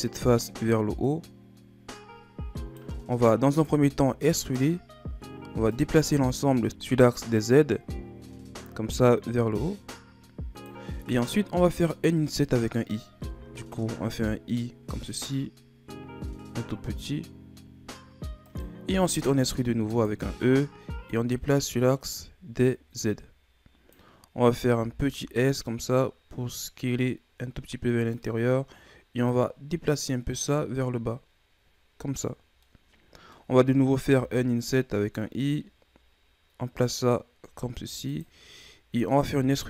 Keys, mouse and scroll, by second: 3.7 e, 5.7 click, 9.8-10.9 drag, 10.9-13.3 middle drag, 13.3 i, 19.4 e, 21.1-24.1 drag, 24.7 s, 29.3-32.3 drag, 32.6-34.1 middle drag, 34.1 i, 39.1 e.